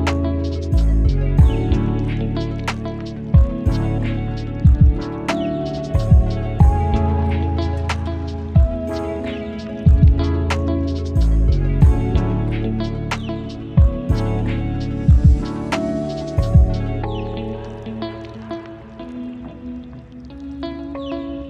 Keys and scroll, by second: 1.5 ctrl+z, 1.8 ctrl+z, 5.1 ctrl+z, 5.6 ctrl+z.